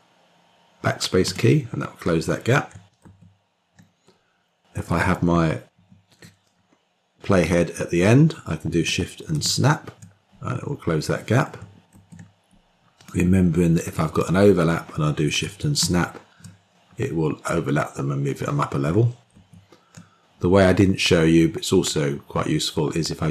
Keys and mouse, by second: 1.1 BackSpace, 3.2 ctrl+z, 5.6 Page_Up, 9.4 shift+s, 11.8 ctrl+z, 13.2 click, 15.9 shift+s, 19.4 ctrl+z.